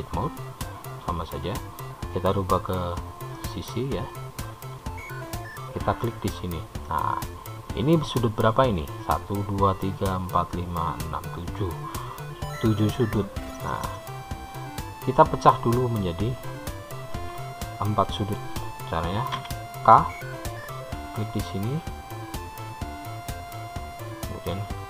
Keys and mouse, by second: 2.7-3.7 drag, 3.7-5.2 middle drag, 5.8 click, 7.2-9.0 middle drag, 19.6 k.